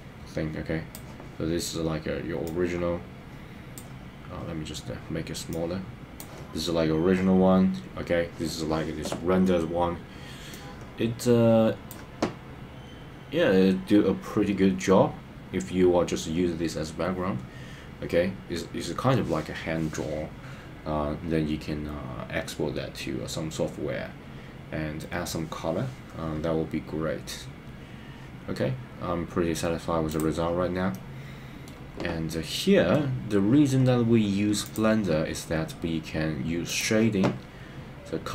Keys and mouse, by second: 30.9 middle click, 32.3 middle click.